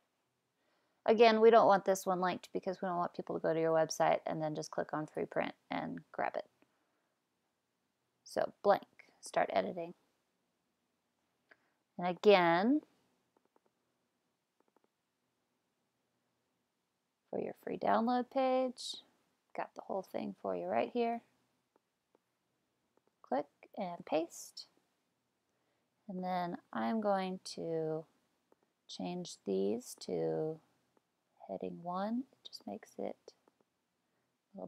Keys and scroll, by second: 19.7 super+c, 23.9 super+v.